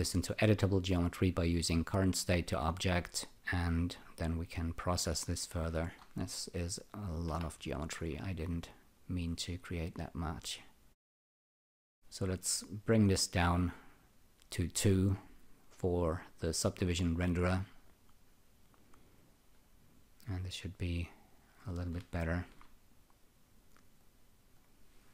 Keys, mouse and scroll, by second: 1.6 click, 3.3 click, 4.0 click, 6.6 click, 7.3 Delete, 9.9 click, 11.1 click, 13.5 click, 18.6 click, 19.1 click, 19.5 right click, 21.1 click, 22.3 alt+shift+click, 23.9 click, 24.5 click.